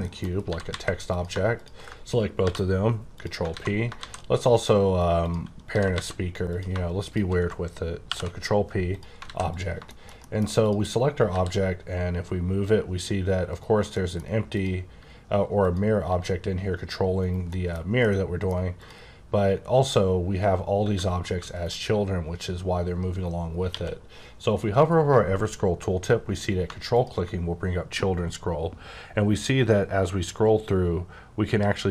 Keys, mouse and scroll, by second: 0.0 shift+middle click, 0.2 shift+scroll down 2, 0.4 typing, 1.1 click, 2.4 ctrl+p, 3.1 click, 3.5 alt+a, 5.2 click, 5.7 typing, 6.5 click, 6.6 shift+click, 8.0 click, 8.3 p, 8.9 click, 9.2 alt+a, 9.5 click, 9.8 shift+middle click, 10.0 shift+scroll down 2, 10.2 middle click, 10.6 click, 11.2 r, 13.5 right click, 13.8 middle click, 14.4 click, 15.6 click, 16.0 g, 17.4 middle click, 18.0 middle click, 18.8 click, 20.9 r, 21.5 right click, 23.6 q, 26.9 ctrl+click, 29.9-30.7 scroll up 10, 30.7-31.7 scroll down 4, 31.7-31.9 scroll up 7.